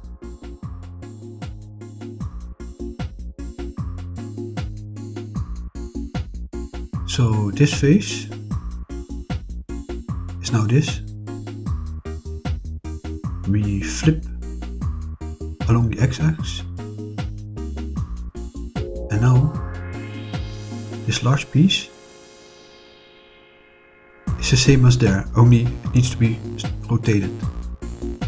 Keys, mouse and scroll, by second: 1.5 middle click, 3.6 middle click, 6.6 click, 7.2 click, 10.0 click, 11.7 click, 12.2 click, 13.5 right click, 16.4 click, 19.2 click, 20.1-22.5 middle drag, 23.0-24.9 middle drag, 26.9 click.